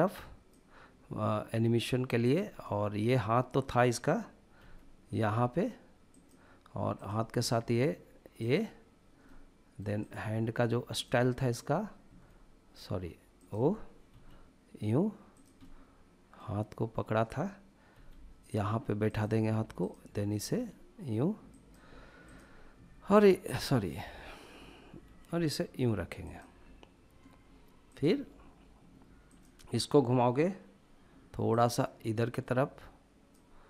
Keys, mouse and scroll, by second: 2.0 click, 2.4-4.4 middle drag, 4.4 g, 5.9 click, 6.7-7.2 drag, 7.2 g, 8.2-8.9 drag, 9.0-9.7 middle drag, 9.7 drag, 10.7 drag, 11.1-11.8 middle drag, 11.8 g, 13.1 click, 13.9 r, 15.1 click, 15.4-16.2 middle drag, 17.7 g, 18.9 click, 19.5-20.2 drag, 20.2 g, 21.3 click, 22.0-22.6 drag, 22.6 g, 23.3-24.8 right drag, 24.8 r, 26.0 click, 27.6-33.6 drag.